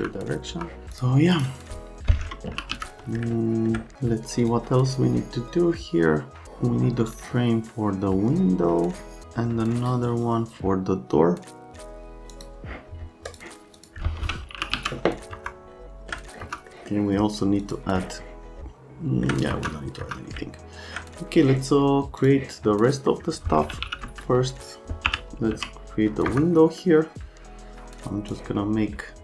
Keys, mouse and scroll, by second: 0.5 F3, 1.0 click, 1.3 scroll up 1, 2.2-3.2 typing, 4.4 middle click, 12.3 click, 13.3 click, 13.8 click, 14.3-15.3 typing, 15.3 F3, 15.8 alt+middle click, 16.4 F3, 16.7 middle click, 17.6 middle click, 18.6 alt+middle click, 19.5 F3, 20.0 F3, 20.4 alt+middle click, 22.2 click, 22.9 right click, 23.6-25.5 typing, 26.3 F3, 28.3-29.2 drag.